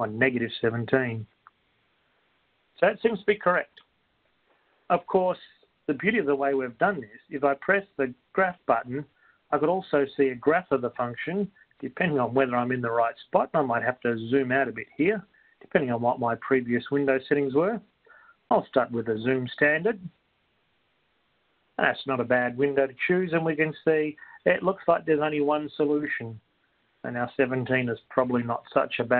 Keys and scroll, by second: 0.8-1.9 typing, 19.2 6.